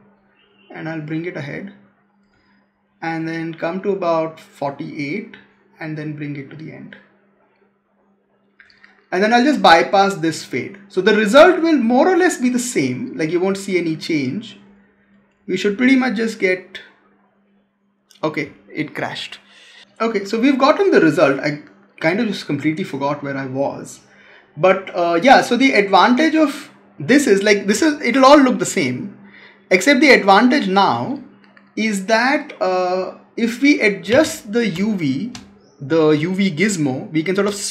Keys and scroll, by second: 34.6 space.